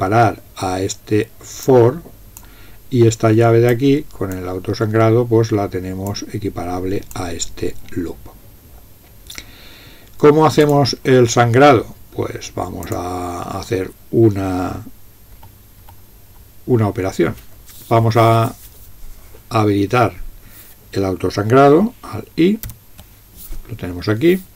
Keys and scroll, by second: 15.4 Up, 15.9 Up, 16.3 Up, 22.7 alt+i.